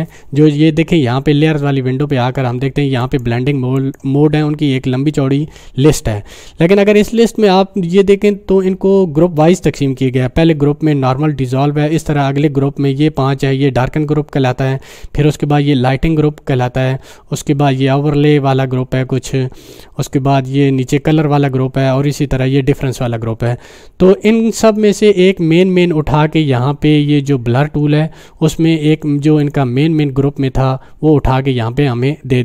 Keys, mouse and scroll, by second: 3.0 click, 28.9 click.